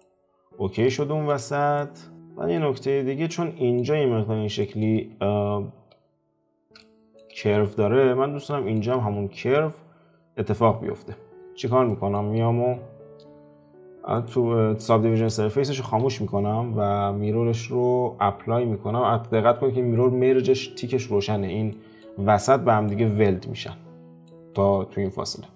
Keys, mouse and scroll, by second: 0.0-1.5 middle drag, 1.5 scroll down 2, 1.7-4.9 middle drag, 4.9 `, 5.7 `, 6.8-7.4 shift+middle drag, 7.4 scroll up 2, 8.4-11.3 shift+middle drag, 11.3 scroll up 5, 11.9-14.1 shift+middle drag, 14.1-14.9 drag, 15.2 click, 16.0 F4, 21.7-22.1 middle drag, 22.1-22.5 scroll down 2, 22.5-23.5 shift+middle drag, 23.5 scroll down 1, 23.6-25.5 middle drag.